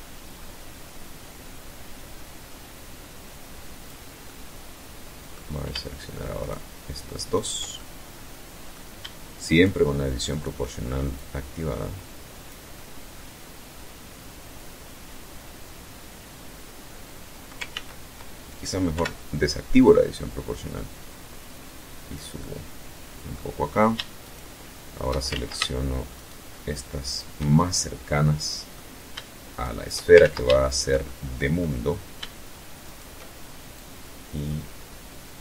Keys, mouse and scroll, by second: 1.5-2.0 scroll up 2, 3.1-4.3 middle drag, 5.3 shift+right click, 6.2 shift+right click, 6.6-7.8 shift+middle drag, 8.3 shift+right click, 9.2 shift+right click, 10.0-11.5 drag, 11.6-16.5 middle drag, 16.6 ctrl+z, 17.8 o, 18.7-21.1 drag, 21.2-22.4 middle drag, 23.0 shift+right click, 24.1 ctrl+shift+z, 24.9 shift+right click, 25.9 shift+right click, 26.4-27.8 shift+middle drag, 28.4 shift+right click, 29.0 ctrl+shift+z, 29.5 ctrl+shift+right click, 29.9-30.6 ctrl+shift+middle drag, 30.7-31.0 scroll up 2, 31.7 shift+right click, 32.6-35.0 drag, 35.0 scroll down 2, 35.3-35.4 middle drag.